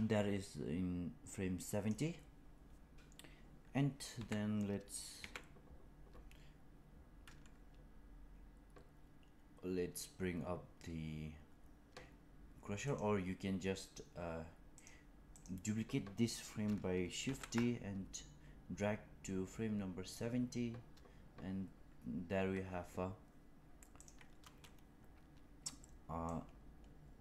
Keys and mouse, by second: 4.0 g, 14.7 click, 15.2 click, 17.1 shift+d, 26.2 click.